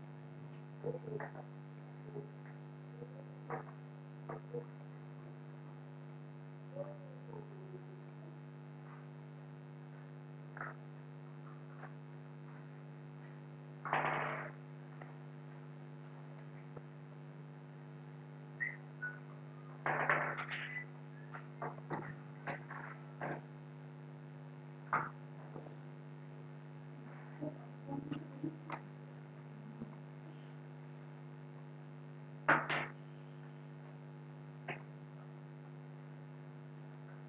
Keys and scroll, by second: 17.0 ctrl+k, 29.2 ctrl+q.